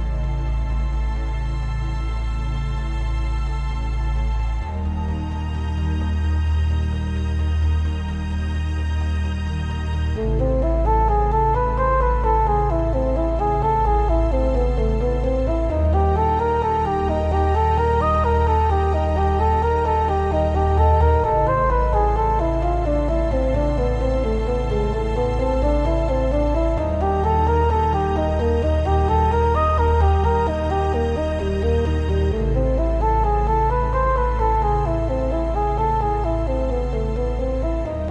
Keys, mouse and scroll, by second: 0.1 `, 0.6 shift+middle click, 1.0 click, 1.5 click, 1.8 c, 3.4 right click, 3.5 scroll up 1, 3.6-8.3 middle drag, 4.0-5.3 scroll up 2, 5.3 ctrl+KP_Add, 5.9 x, 7.9-8.3 scroll up 2, 8.3 click, 8.8 alt+shift+click, 9.2 alt+shift+click, 9.9 scroll down 2, 10.1-12.1 middle drag, 12.1 alt+shift+click, 12.5-14.8 middle drag, 13.3 c, 14.8 right click, 14.9-17.4 shift+middle drag, 15.3 c, 17.4 right click, 17.6-19.5 middle drag, 18.3 c, 19.5 right click, 19.6-24.2 middle drag, 20.8 scroll up 2, 21.5 x, 22.3 Tab, 23.0-23.7 scroll down 2, 24.2 click, 24.3 scroll up 1, 24.6-26.1 middle drag, 25.4-25.7 scroll up 1, 26.1 click, 26.6 shift+click, 27.6 Tab, 30.0 1, 31.6 Tab, 32.0 shift+click, 32.6 scroll down 1, 32.7-33.2 middle drag, 33.2 click, 33.5 scroll down 1, 33.7 middle click, 34.1 click, 35.0 ctrl+j, 35.5 scroll up 1, 35.8-36.5 middle drag, 36.2-36.5 scroll up 1, 36.5 click, 36.8-37.3 scroll down 2, 36.9-38.1 middle drag, 37.7 scroll down 1.